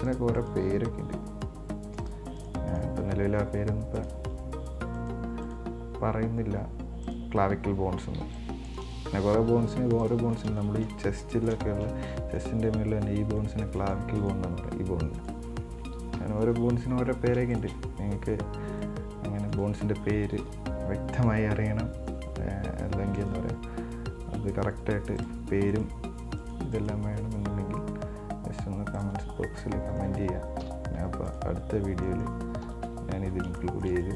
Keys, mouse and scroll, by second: 0.6 right click, 1.3 g, 2.6 right click, 2.9 right click, 3.3 g, 5.2 right click, 5.7 right click, 6.2 g, 8.4 b, 9.7 g, 10.5 scroll down 8, 10.8 shift+middle click, 11.3 scroll down 2, 11.4 middle click, 12.2 scroll up 1, 12.3-14.0 middle drag, 14.0 right click, 14.4 right click, 15.4 right click, 16.4 KP_7, 17.2 scroll up 4, 17.8 shift+right click, 18.8 scroll down 3, 19.0-19.8 middle drag, 19.8 right click, 20.6 KP_7, 22.3 r, 24.5 g, 25.9 right click, 26.3 g, 27.0 right click, 27.4 g, 29.7 scroll down 2, 29.8-30.8 middle drag, 30.8 KP_1, 31.5 right click, 31.9-32.3 scroll up 5, 32.3 middle click, 32.8 KP_1, 33.0 KP_3, 33.8 shift+middle click.